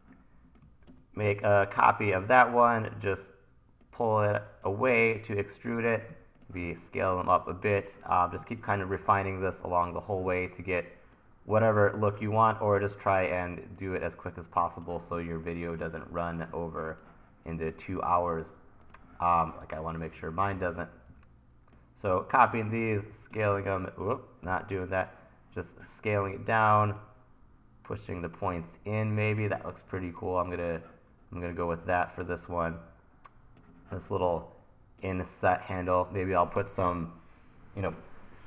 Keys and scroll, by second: 1.2 e, 6.6 t, 8.1 super+z, 8.8 t, 10.3 e, 18.3 super+z, 21.1 e, 22.5 t, 23.5 super+z, 24.5 t, 26.2 e, 31.9 t.